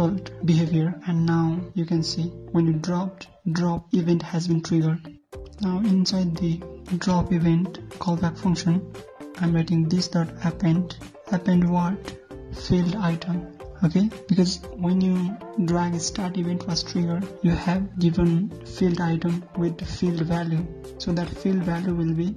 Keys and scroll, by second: 2.1 ctrl+s, 2.2 alt+Tab, 2.3 ctrl+F5, 7.1 alt+Tab, 20.0 ctrl+c.